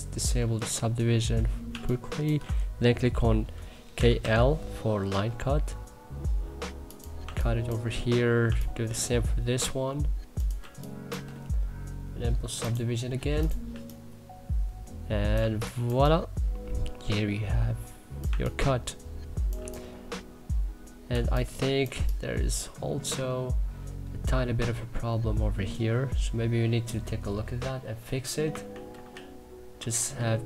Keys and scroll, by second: 0.2 q, 0.9 3, 3.4-4.3 typing, 6.9 2, 12.8 e, 13.4 3, 21.5 3, 28.3 ctrl+z.